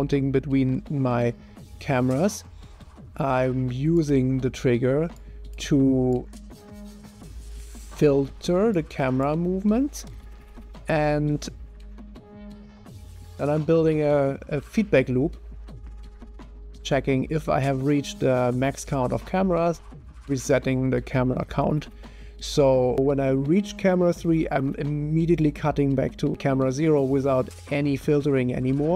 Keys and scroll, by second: 0.0-0.6 typing, 10.2 0, 10.9 0, 12.0 0.